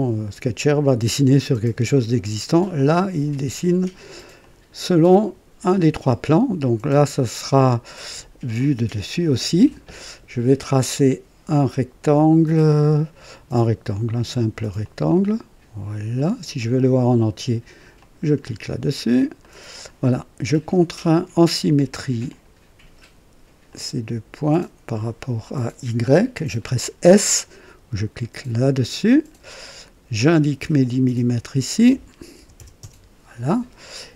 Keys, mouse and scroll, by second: 2.7 click, 4.3 click, 8.5 click, 12.8 click, 14.7 click, 16.1 click, 17.9 click, 18.9-19.4 scroll up 2, 19.4 right click, 20.6 right click, 22.2 click, 23.6 click, 24.9 click, 28.3 s, 30.1 click, 31.4 click, 32.3 KP_1, 32.5 KP_0, 32.7 Return.